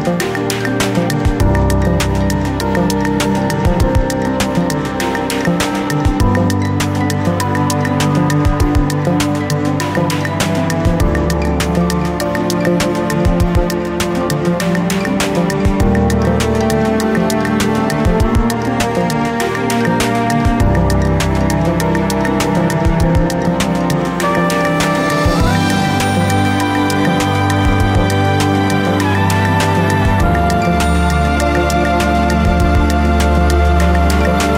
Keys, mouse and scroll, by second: 0.2 click, 0.4 ctrl+z, 0.8-3.7 shift+middle drag, 1.0-1.7 scroll up 1, 1.9 r, 3.7 g, 5.2 click, 5.4 g, 5.9-6.8 scroll down 1, 6.8 e, 7.3 g, 8.3-9.1 scroll down 1, 9.1-14.9 middle drag, 9.6 KP_3, 9.9 scroll up 1, 10.6 r, 14.9 g, 17.1 click, 17.9 r, 18.4 ctrl+z, 19.0 ctrl+r, 20.3 scroll down 1, 20.5-23.3 shift+middle drag, 20.7 scroll up 1, 21.2 g, 23.3 click, 23.6 ctrl+r, 24.9 g, 26.3 click, 27.0 ctrl+r, 27.7 click, 28.1 g, 30.2 click, 30.7-32.5 shift+middle drag, 31.2 ctrl+r, 32.9 g.